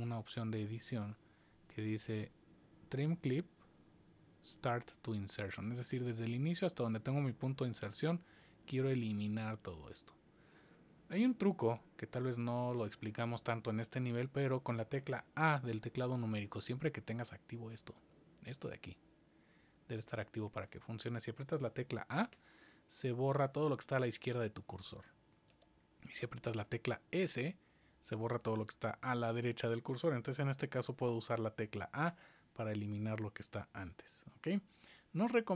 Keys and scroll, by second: 11.6 super+z, 22.3 a, 25.5 super+z, 26.6 s, 28.2 super+z, 30.3 a.